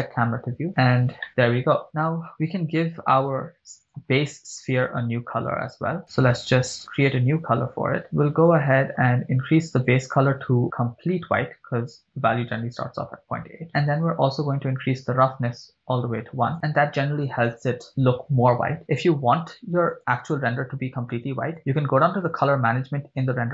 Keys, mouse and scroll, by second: 0.4 n, 0.7 scroll up 3, 1.3 shift+middle click, 1.8 right click, 3.4-4.6 drag, 5.9 click, 8.0 click, 8.5-9.5 middle drag, 10.4 click, 13.7-14.5 middle drag, 14.9-16.6 drag, 19.9 click, 20.5 scroll down 3, 21.6 click, 22.2 scroll down 2.